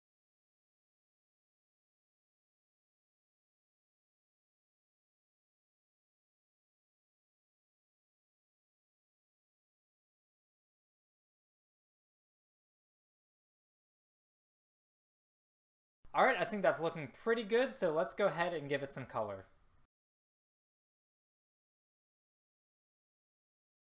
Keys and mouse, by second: 0.2 middle click, 1.0 click, 1.0-8.0 typing, 1.2 click, 3.5-4.1 drag, 9.2-10.6 typing, 11.1 Delete, 12.4-16.0 typing, 12.7 middle click, 13.5 middle click, 13.8 middle click, 13.9 right click, 15.4 middle click, 20.6 click, 22.9 c, 23.5 middle click.